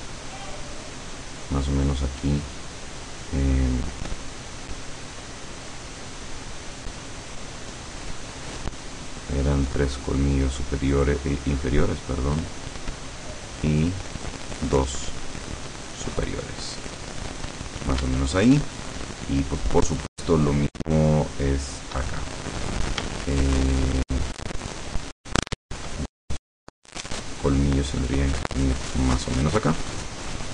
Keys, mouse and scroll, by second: 4.2-6.2 drag, 6.7-8.2 drag, 8.7-10.4 drag, 11.1-13.1 drag, 13.4-14.8 drag, 15.1-16.4 drag, 16.7 click, 18.4-22.1 shift+middle drag, 23.2-26.1 shift+middle drag, 27.5-28.2 shift+middle drag.